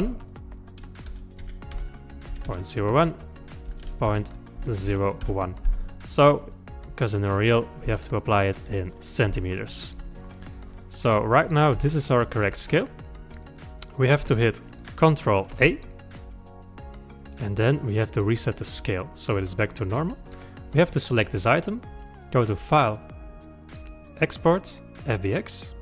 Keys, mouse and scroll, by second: 0.3 click, 7.4-8.0 scroll up 5, 8.0 shift+middle click, 8.8-9.4 scroll up 5, 9.4 shift+middle click, 10.1-11.9 scroll up 22, 11.9-15.1 shift+middle drag, 15.5 ctrl+a, 20.1 click, 20.8 click, 22.3 click.